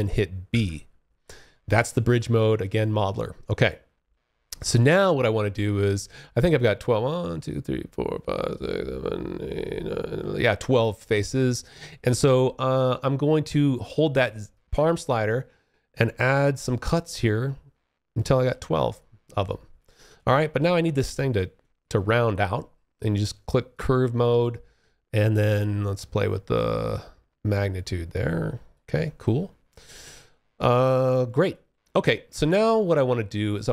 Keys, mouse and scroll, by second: 0.3 alt+click, 1.4 alt+middle click, 3.2 alt+middle click, 3.7 alt+click, 9.8 alt+click, 13.5 alt+click, 14.2-17.5 z, 18.1 alt+click, 20.9 alt+click, 22.8 click, 24.7 click, 28.3 alt+click, 29.4 alt+middle click, 29.9 alt+click, 30.8 alt+middle click, 31.2 alt+click.